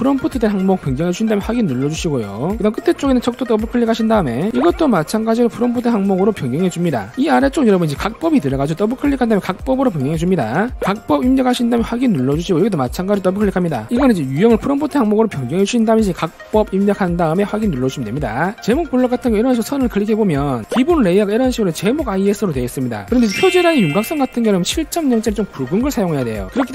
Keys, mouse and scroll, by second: 1.2 click, 2.0 click, 4.2 click, 4.4 click, 5.1 click, 6.2 click, 7.1 click, 9.7 click, 9.9 click, 12.3 click, 13.7 click, 13.9 click, 14.4 click, 15.6 click, 16.0 click, 17.1 r, 17.2 r, 17.8 q, 18.0 q, 20.5 click.